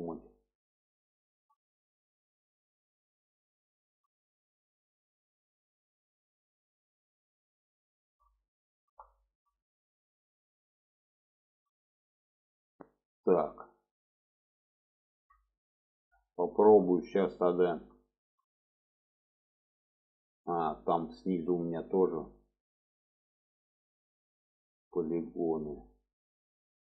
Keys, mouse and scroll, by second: 1.1 shift+middle click, 3.1 middle click, 3.7 shift+middle click, 5.0 middle click, 6.4 middle click, 7.9 shift+middle click, 8.5 alt+middle click, 9.2 shift+middle click, 10.4 shift+middle click, 11.4 shift+middle click, 13.4 middle click, 14.3 middle click, 16.1 middle click, 17.4 shift+middle click, 18.5 shift+middle click, 22.8 shift+middle click, 23.6 middle click, 24.5 shift+middle click, 24.9 middle click, 25.5 shift+middle click, 26.2 shift+middle click.